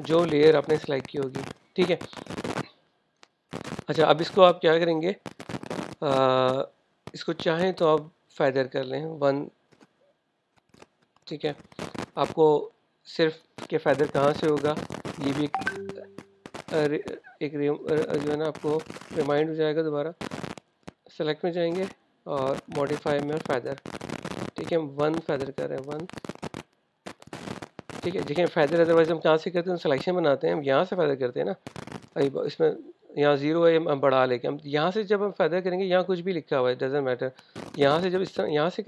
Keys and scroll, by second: 27.1 1.